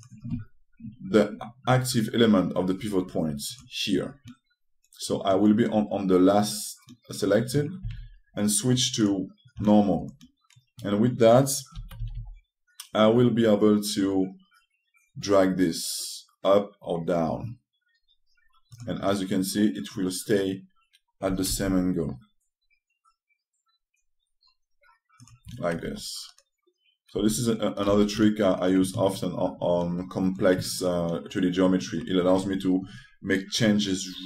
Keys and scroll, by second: 8.5 ctrl+space, 12.4 s.